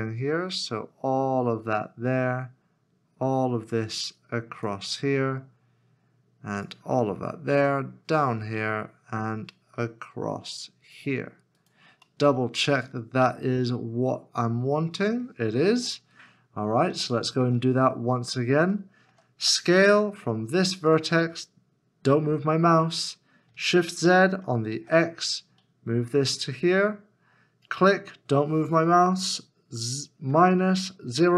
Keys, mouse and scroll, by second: 11.6-12.0 scroll down 1, 12.0 right click, 12.1 middle click, 15.7 alt+z, 16.4-16.9 scroll up 1, 17.1 shift+middle click, 17.5 shift+scroll down 1, 18.7 shift+middle click, 19.4 scroll up 1, 19.4 s, 23.5 s, 23.9 shift+z, 30.3-31.3 typing.